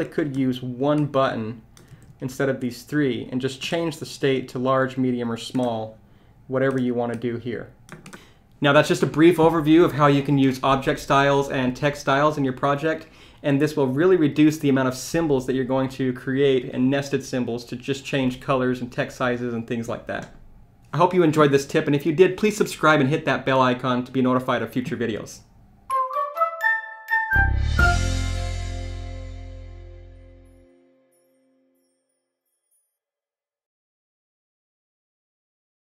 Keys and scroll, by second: 1.9 super+z.